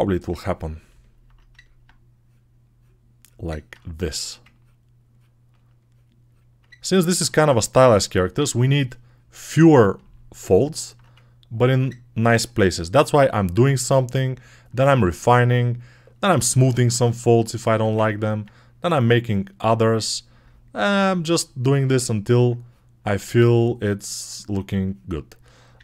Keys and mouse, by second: 2.7-6.8 right drag, 6.9-9.7 ctrl+alt+drag, 7.3 ctrl+z, 12.4 g, 14.6-16.5 alt+right drag, 16.5 alt+click, 16.6 ctrl+alt+right click, 17.0-18.2 ctrl+alt+drag, 17.5 1, 18.3 click, 19.8-25.8 alt+right drag, 19.8 typing.